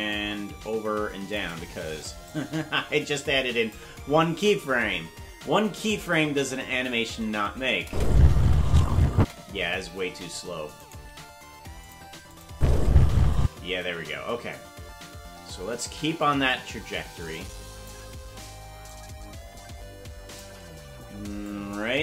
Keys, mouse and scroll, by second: 0.1-1.4 shift+drag, 2.2-3.7 drag, 5.3 scroll up 1, 6.2 scroll down 1, 7.8 space, 9.2 space, 10.8 right click, 11.0 g, 12.3 click, 12.5 space, 13.4 space, 16.4-17.9 shift+drag, 18.8-20.4 shift+drag, 21.4-22.0 shift+drag.